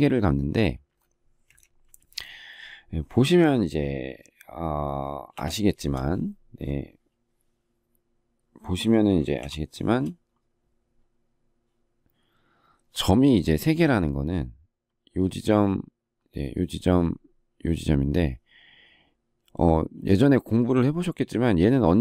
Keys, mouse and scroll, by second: 5.3 ctrl+shift+2, 9.3 ctrl+shift+3.